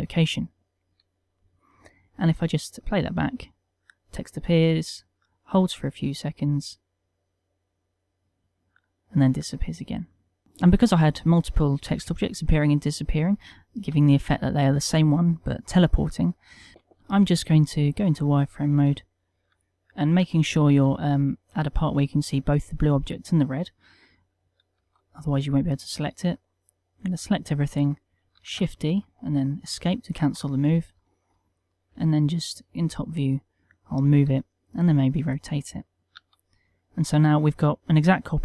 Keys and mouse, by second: 2.5 click, 3.4 click, 16.7 z, 21.4 shift+middle click, 21.8 ctrl+middle click, 25.3 z, 26.4 b, 29.2 shift+d, 30.8 KP_7, 31.6 ctrl+middle click, 32.5 g, 33.5 click, 34.9 r, 35.9 click, 36.7 z, 37.2 middle click.